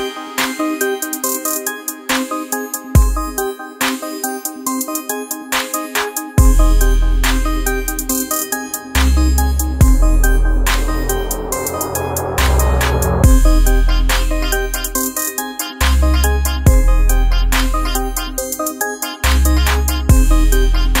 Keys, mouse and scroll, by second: 0.1 space, 0.4 click, 0.7 space, 2.5 click, 8.0-21.0 drag.